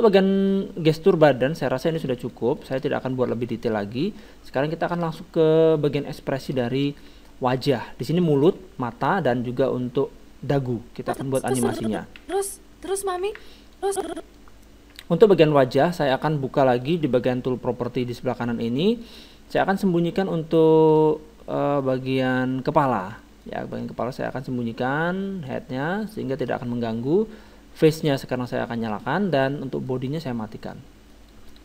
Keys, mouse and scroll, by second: 0.6-8.7 middle drag, 11.0-12.7 drag, 12.2 alt+a, 13.8 alt+a, 13.8-15.6 drag, 15.6 middle click, 16.8-18.5 drag, 18.6-20.6 drag, 20.9-22.9 drag, 22.9-25.0 middle drag, 24.2-27.3 drag, 26.1-27.8 middle drag, 28.0-30.2 drag, 30.2-31.6 middle drag.